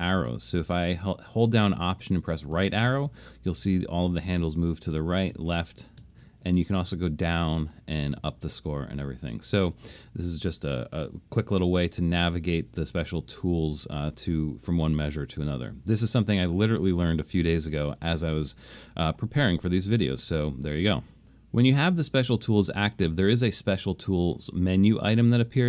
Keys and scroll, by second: 2.6 alt+Right, 5.3 alt+Left, 6.0 alt+Left, 6.9 alt+Down, 7.5 alt+Down, 8.2 alt+Up, 8.6 alt+Right, 9.0 alt+Down, 9.5 alt+Right, 9.9 alt+Up, 10.4 alt+Left, 10.8 alt+Up, 11.8 alt+Right.